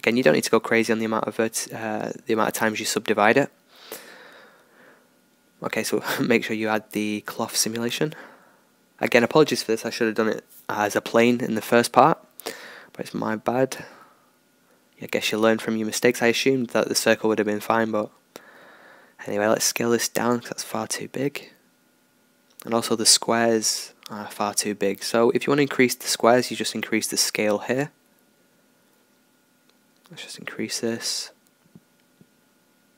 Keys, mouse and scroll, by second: 0.6 w, 1.6 Tab, 3.2 alt+a, 4.9-10.4 drag, 10.2 alt+a, 10.5 click, 15.8 click, 16.5 middle click, 16.9 click, 17.1 middle click, 18.5 s, 21.7-23.8 middle drag, 23.8-31.8 drag.